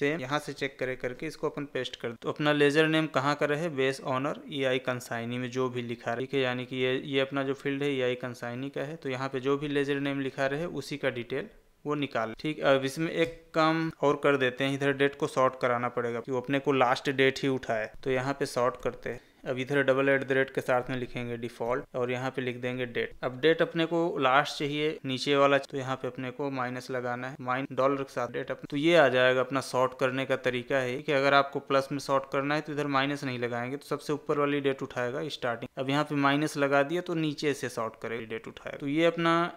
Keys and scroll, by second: 0.8 ctrl+v, 18.8 Tab.